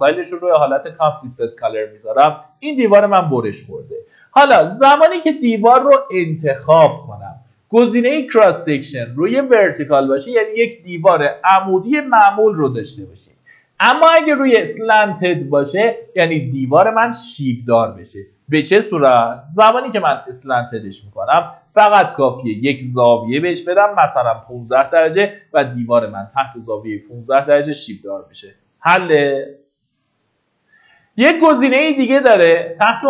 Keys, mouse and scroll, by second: 1.0 scroll up 1, 3.0-3.9 scroll down 1, 4.0 click, 23.6 KP_1, 26.1 KP_5, 31.8 click.